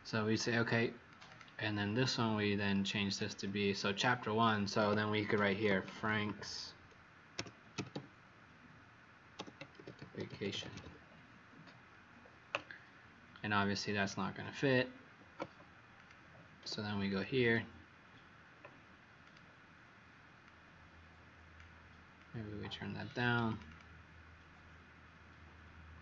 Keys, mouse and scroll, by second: 1.2 click, 2.0 click, 4.9-8.4 typing, 9.4-11.2 typing, 13.9 click, 17.4 click, 19.2 click, 23.6 click.